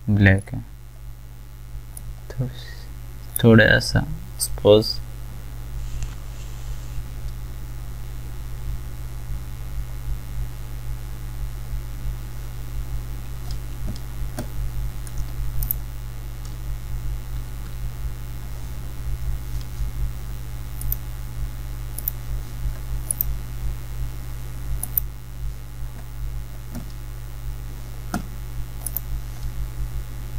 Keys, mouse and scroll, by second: 20.8 click, 28.9 click.